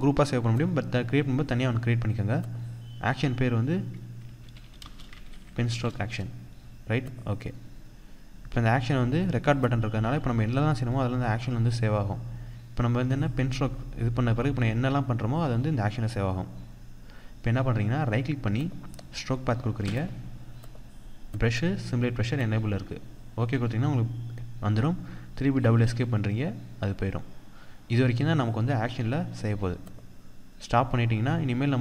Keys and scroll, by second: 6.9 Return, 24.9 Escape, 27.0 Escape.